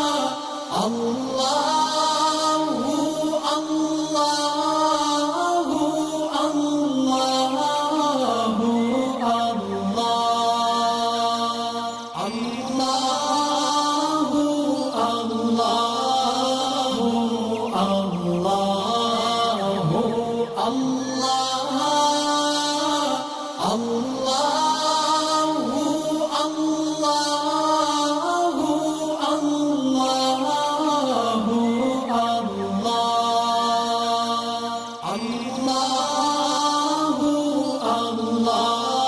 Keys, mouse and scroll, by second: 5.1 alt+scroll down 1, 6.3 click, 7.0-7.5 alt+drag, 9.7 alt+scroll up 1, 10.6-11.2 drag, 13.5 alt+scroll up 1, 13.8 alt+click, 14.5 alt+scroll up 1, 15.0 alt+click, 15.3-15.6 alt+scroll down 2, 16.6 click, 16.8 scroll up 2, 16.9 space, 17.0 click, 17.5 space, 17.6 click, 18.2-20.3 alt+drag, 20.6 alt+scroll down 1, 21.7 click, 23.3 alt+scroll up 1, 23.8-25.8 alt+drag, 30.2 alt+scroll up 1, 30.6-33.2 drag, 34.4-35.3 click, 35.5 alt+scroll down 1, 36.0 click, 36.3 space, 36.5 click, 36.9 alt+scroll up 1, 37.7 alt+scroll up 1, 38.3 alt+scroll up 1, 38.8 alt+scroll down 1.